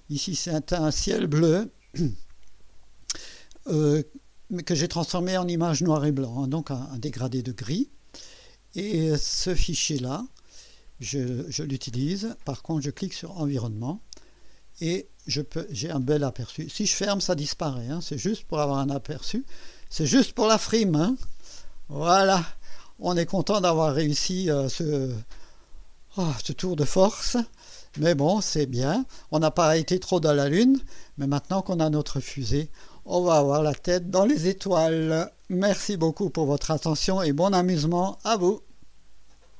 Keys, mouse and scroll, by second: 8.7 Escape, 13.3 click, 15.3-16.7 drag, 18.0-22.3 drag, 22.7 scroll up 2, 24.8 scroll down 1, 25.3-26.4 right drag, 27.4-29.0 drag, 38.2 right click, 39.5 click.